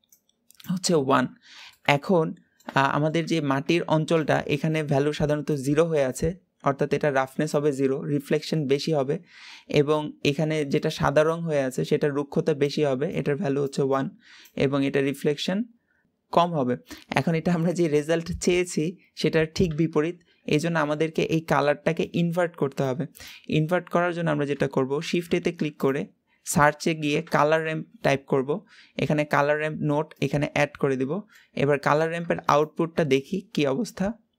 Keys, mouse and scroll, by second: 32.4 ctrl+shift+click.